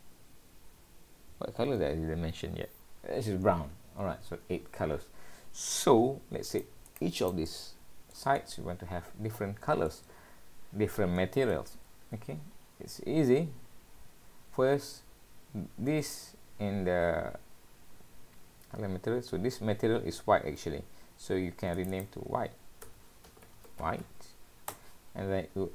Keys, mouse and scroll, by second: 5.4-6.5 scroll up 1, 6.5 click, 7.1 click, 7.5 click, 7.5 middle click, 8.4 middle click, 10.2-10.8 scroll up 2, 11.2 middle click, 12.5 scroll down 1, 12.8-14.2 scroll up 12, 18.0-19.3 scroll up 1, 19.3 scroll up 1, 21.8 click, 21.9 click.